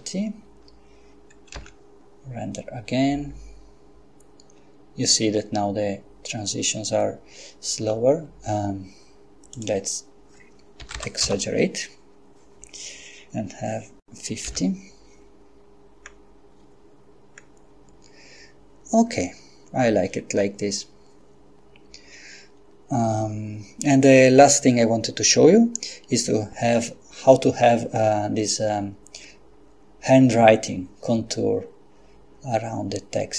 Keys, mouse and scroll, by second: 1.5 F12, 7.8 Escape, 9.5 click, 10.8 5, 11.0 0, 11.3 Return, 14.5 F12, 16.1-16.5 scroll down 2, 17.4-17.9 scroll down 2.